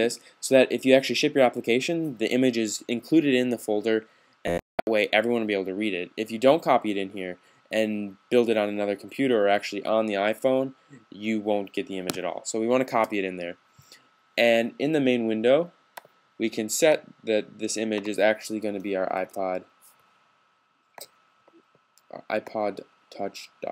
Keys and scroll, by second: 18.5-18.9 typing.